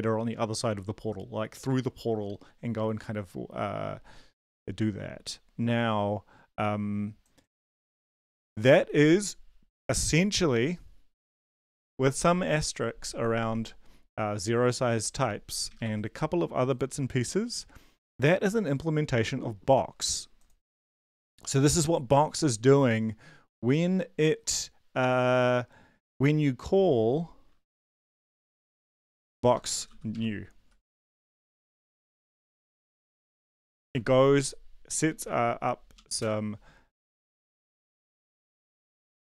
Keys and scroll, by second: 15.8 super+Left, 20.8 ctrl+`, 29.4-30.4 typing, 30.5 Right, 31.1 Up, 31.3 Up, 31.4 Up, 32.0 shift+Up, 32.3 shift+Right, 32.5 shift+Up, 32.7 shift+Right, 33.2 ctrl+/, 33.9 ctrl+s, 35.2 ctrl+`, 36.2 shift+Return, 38.6 ctrl+`.